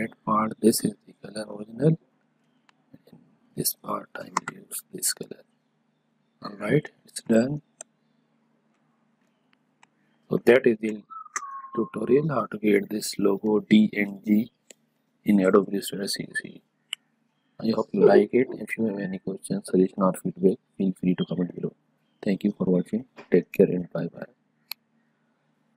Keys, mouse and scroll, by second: 0.6 click, 3.1 shift+click, 4.3 i, 5.2 click, 6.2 click, 6.9 ctrl+click, 7.7 ctrl+click, 8.1 ctrl+click, 8.6 ctrl+click, 24.6 click.